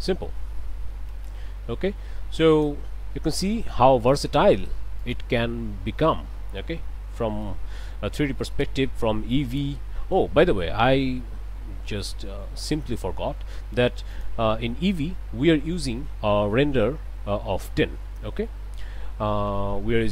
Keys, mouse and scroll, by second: 1.2 space, 2.5 click, 4.0 click, 5.0 click, 6.0 middle click, 6.9 scroll up 1, 7.4 shift+middle click, 8.1 shift+scroll down 1, 8.5 middle click, 8.7-10.4 drag, 11.6-12.2 scroll up 2, 14.1 click, 18.7 click, 19.5 KP_0.